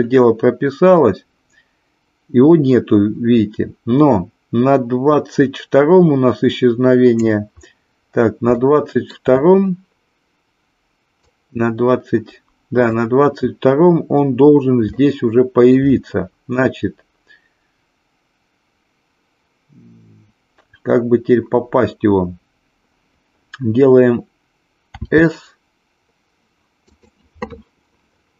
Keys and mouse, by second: 1.0-7.3 drag, 8.5-9.1 shift+middle drag, 11.3-13.1 drag, 14.9-15.8 shift+middle drag, 24.9 s.